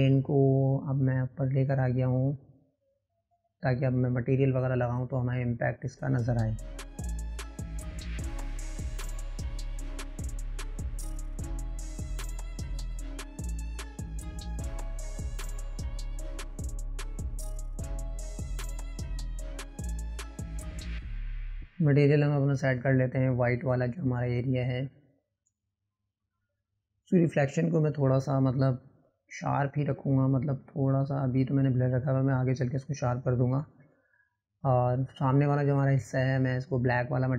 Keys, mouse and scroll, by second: 4.2-4.9 middle drag, 4.9-6.0 scroll down 8, 6.0 click, 7.2-9.2 middle drag, 9.2 click, 9.5 middle click, 9.7-10.2 scroll up 2, 10.2 click, 11.4-12.8 drag, 13.3-17.0 drag, 17.3-17.7 drag, 17.7 Delete, 18.3 click, 19.7 click, 21.6-28.2 drag, 30.2-34.2 drag.